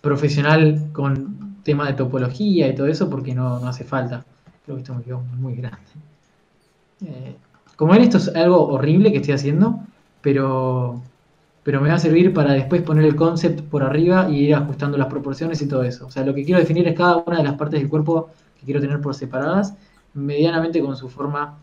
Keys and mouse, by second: 0.8 f, 3.3 a, 3.9 right click, 5.1 KP_3, 5.9 s, 7.1 click, 7.7 a, 10.0 a, 12.2 KP_Decimal, 16.7 a, 16.9-17.9 right drag, 20.2 a, 20.3 right click.